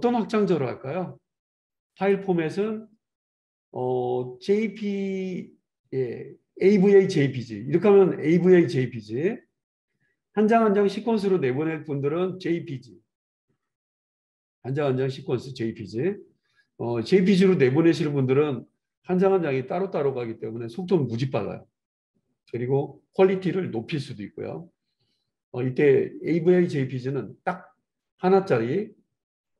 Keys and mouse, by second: 11.8-28.2 drag, 28.2-29.5 right drag.